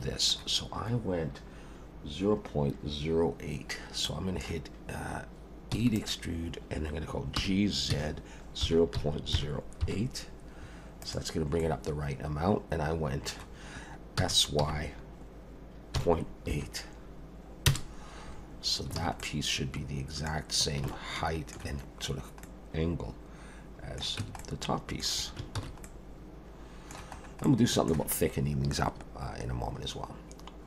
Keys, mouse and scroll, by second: 4.0 middle click, 5.7 e, 7.4 g, 11.6 middle click, 14.2 s, 19.0 alt+a, 19.2 middle click, 20.4 scroll down 2, 20.9 shift+middle click, 22.4 middle click, 24.2 Tab, 24.4 middle click, 25.6 ctrl+s, 25.8 middle click, 27.2 scroll up 2, 27.5 middle click.